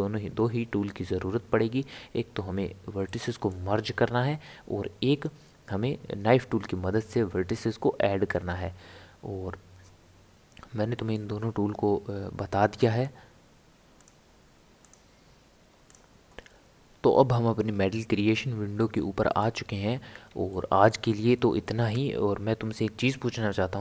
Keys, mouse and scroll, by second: 3.0-6.1 middle drag, 11.0-14.0 middle drag.